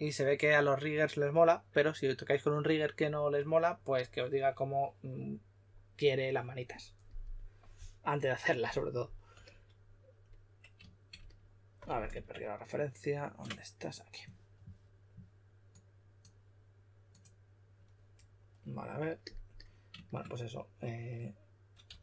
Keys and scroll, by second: 12.1 super+Tab, 21.8 w.